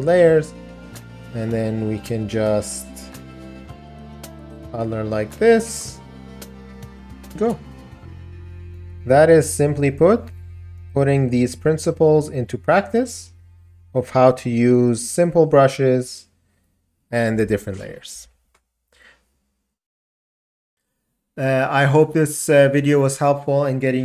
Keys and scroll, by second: 18.3 ].